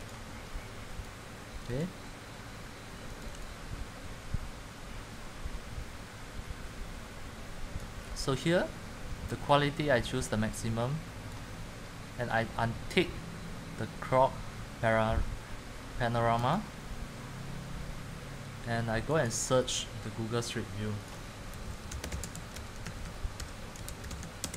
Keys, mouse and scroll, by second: 0.2 click, 1.2 click, 3.4 click, 16.6 click, 21.7-24.5 typing.